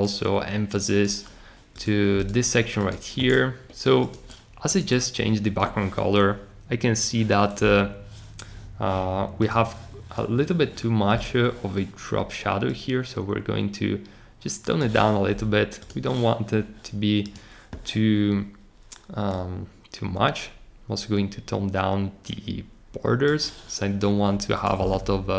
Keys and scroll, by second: 3.4 Escape.